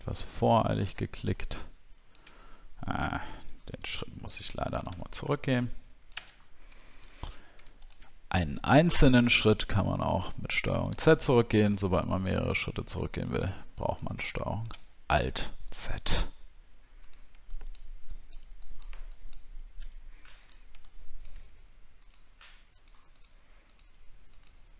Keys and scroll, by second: 4.0 ctrl+z, 6.4 alt+scroll up 6.